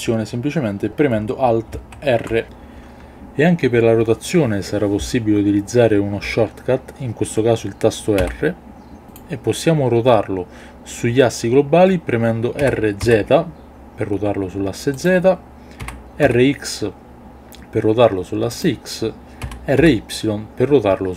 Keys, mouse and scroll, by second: 1.8 alt+r, 8.2 r, 9.0 click, 12.6 r, 13.0 z, 15.0 click, 15.8 r, 16.2 x, 18.5 click, 19.4 r, 19.8 y.